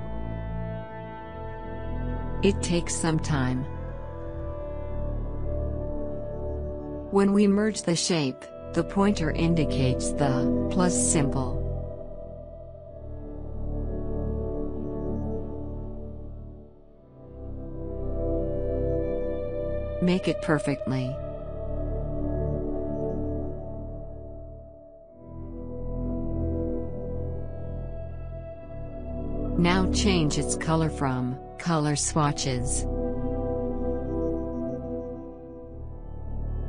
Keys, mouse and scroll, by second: 6.3-7.2 alt+scroll up 1, 7.5 scroll up 1, 9.0-24.5 drag, 29.3 click, 34.8 click.